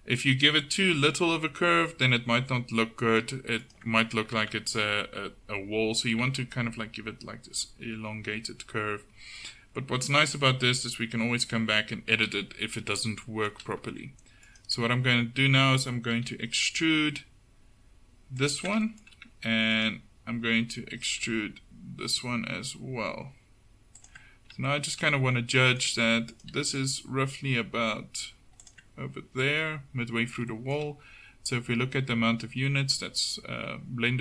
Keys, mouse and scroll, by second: 0.9 g, 10.2 Tab, 12.2 KP_7, 12.5 Tab, 16.2 e, 21.3 e, 26.6 g.